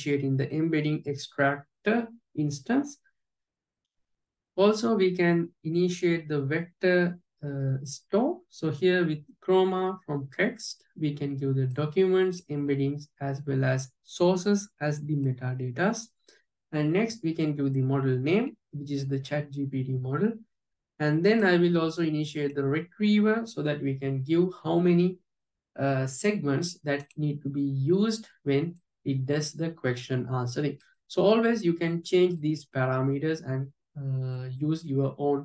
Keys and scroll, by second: 28.8 alt+j, 33.2 alt+j.